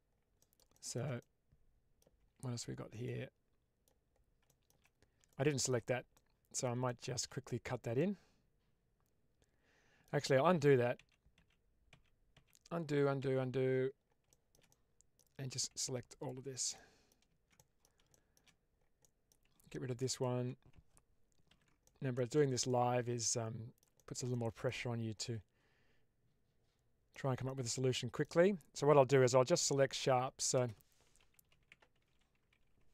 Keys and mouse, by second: 0.3 middle click, 0.7 shift+middle click, 1.1-1.9 middle drag, 2.1 Tab, 2.9 middle click, 4.4 shift+middle click, 5.3 shift+middle click, 6.0 middle click, 6.8 shift+middle click, 7.9-9.9 middle drag, 10.4 ctrl+z, 11.0 ctrl+z, 11.4 ctrl+z, 11.9 ctrl+z, 12.4 ctrl+z, 12.9 ctrl+z, 13.1 ctrl+z, 14.2 shift+middle click, 14.6 middle click, 16.1 alt+click, 16.8 middle click, 17.5 middle click, 18.0 shift+middle click, 18.9 middle click, 21.4 ctrl+x, 21.7 middle click, 22.2 shift+middle click, 22.6-23.7 middle drag, 23.9 middle click, 24.2 middle click, 25.0-27.0 middle drag, 27.2 shift+middle click, 27.5 middle click, 30.5 space.